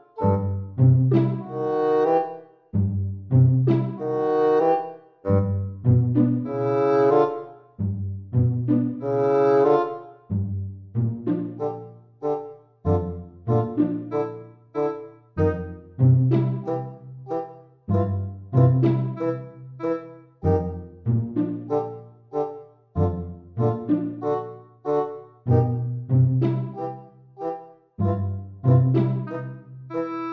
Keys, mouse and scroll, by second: 1.4 click, 9.2 Tab, 9.2 g, 12.5 middle click, 15.9 g, 25.6 middle click, 26.6-27.4 scroll down 5, 27.4 middle click.